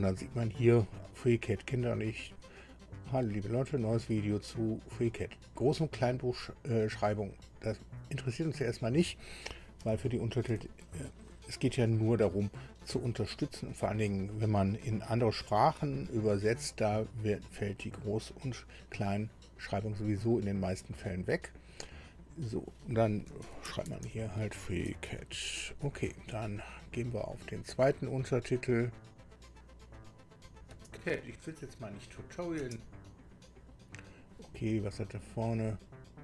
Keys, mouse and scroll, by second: 8.2 click, 10.4 BackSpace, 11.0 BackSpace, 23.2-25.9 typing, 28.5 click, 30.0 click, 32.6 space, 35.8 click.